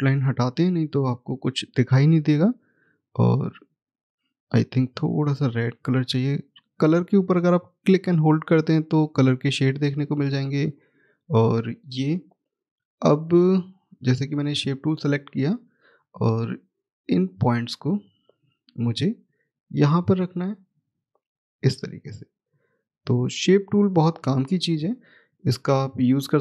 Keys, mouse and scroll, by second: 0.1 right click, 3.3 click, 14.0 click, 15.5-17.3 scroll up 1, 17.3 click, 23.1-23.8 scroll down 1, 23.8-24.1 scroll up 1, 25.2 click.